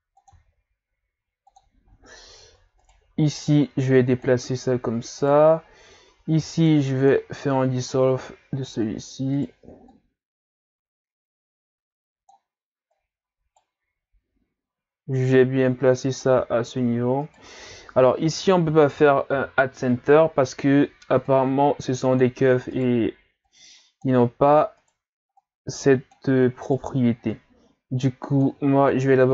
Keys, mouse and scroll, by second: 0.3 e, 2.1 ctrl+scroll down 1, 2.8 right click, 3.5-5.2 drag, 5.2 right click, 6.4 x, 7.9 right click, 9.3 right click, 9.9-13.0 drag, 13.0 right click, 15.4-17.2 drag, 17.2 shift+right click, 18.3-19.3 typing, 21.3-22.7 drag, 22.7 right click, 23.5-24.8 drag, 24.8 right click, 25.4-26.6 drag, 26.6 right click, 27.3-28.9 drag, 28.9-29.3 scroll down 2.